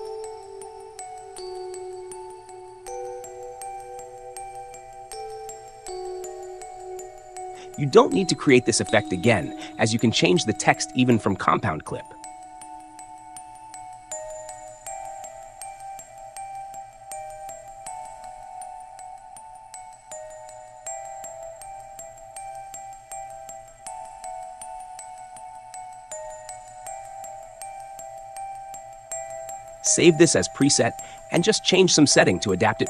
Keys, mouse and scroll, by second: 3.7 space, 5.9 click, 7.7 click, 10.5 click, 11.7 click, 12.2-13.9 typing, 14.0 Return, 17.1-18.1 drag, 19.6-20.8 drag, 21.8 click, 23.9 click, 24.4-26.4 typing, 27.7-29.6 drag, 30.0-31.0 right drag.